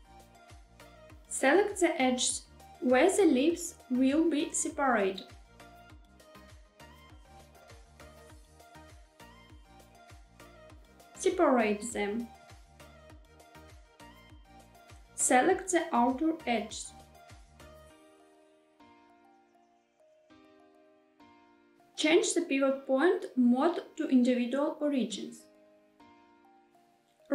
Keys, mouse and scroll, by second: 2.0 click, 3.9 shift+click, 4.3 middle click, 5.1 shift+middle click, 5.8 middle click, 6.8 shift+click, 7.2 middle click, 7.9 shift+middle click, 8.5 middle click, 9.6 shift+click, 10.1 shift+middle click, 10.6 shift+middle click, 11.0 v, 13.6 click, 14.0 middle click, 14.7 shift+middle click, 15.0 shift+click, 15.2 shift+click, 15.6 middle click, 16.1 shift+middle click, 17.4 shift+click, 17.6 shift+click, 18.0 middle click, 18.4 shift+middle click, 19.4 shift+click, 19.6 shift+click, 20.4 middle click, 20.9 shift+middle click, 21.4 middle click, 22.8-24.6 drag, 25.3 shift+middle click, 25.8 shift+middle click, 26.8 s.